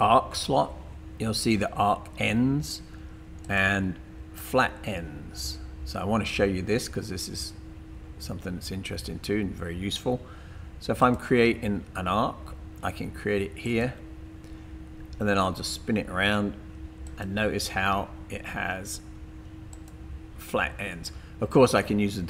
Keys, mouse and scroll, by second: 11.0 click, 13.7 click, 17.0 click, 19.7 click.